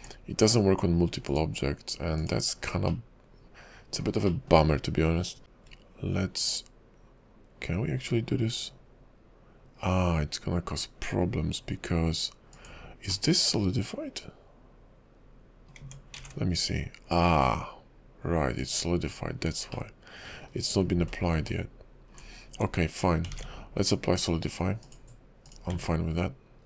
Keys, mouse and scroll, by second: 1.3 click, 3.1 middle click, 4.5 shift+middle click, 4.8-5.4 scroll up 3, 5.4 e, 13.3 middle click, 15.8 Tab, 18.9 ctrl+`, 19.2-19.9 scroll up 2, 19.9 middle click, 21.0 ctrl+z, 21.4 ctrl+z, 22.2-22.6 ctrl+scroll down 4, 22.5 Tab, 23.5 ctrl+`, 25.7 Tab.